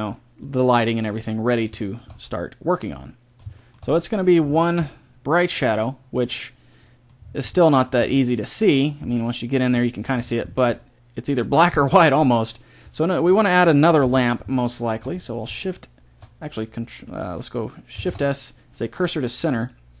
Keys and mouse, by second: 2.3-5.0 middle drag, 5.2-17.2 middle drag, 14.0 KP_1, 18.0 shift+s.